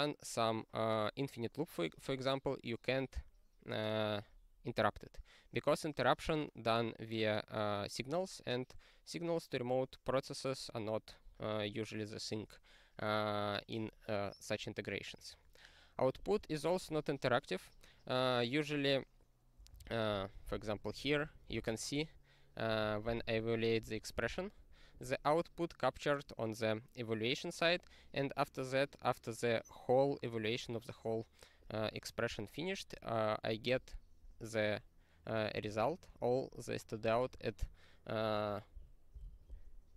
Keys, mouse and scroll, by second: 19.7 click, 20.5 ctrl+p, 20.7 ctrl+p, 20.9 ctrl+p, 21.0 ctrl+p, 21.2 ctrl+p, 24.2 ctrl+e, 32.7 click, 33.5 click, 34.2 click, 39.2 ctrl+s.